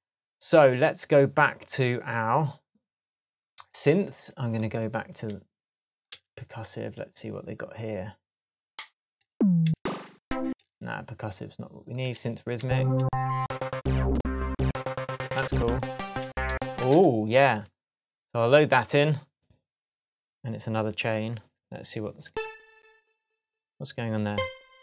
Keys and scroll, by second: 6.1 Right, 9.2 Up, 12.0 Down, 22.2 space.